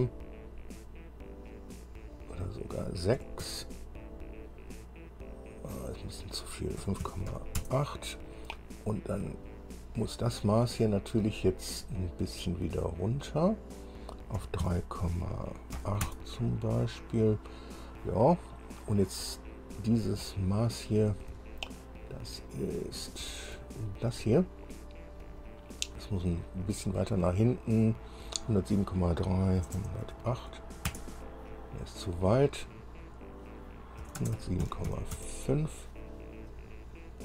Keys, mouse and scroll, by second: 2.4 click, 3.4 KP_6, 3.6 KP_Enter, 6.0 click, 7.0 KP_5, 7.2 KP_Decimal, 7.5 KP_8, 7.8 KP_Enter, 11.4 click, 14.6 KP_3, 14.8 KP_Decimal, 15.9 KP_8, 16.4 KP_Enter, 20.4 scroll down 2, 21.1 scroll down 2, 21.6-23.6 shift+middle drag, 25.4 click, 29.8 KP_1, 30.2 KP_0, 30.8 KP_8, 31.0 KP_Enter, 33.2 click, 34.2-35.1 typing, 35.3 KP_Enter, 36.9-37.2 scroll up 1.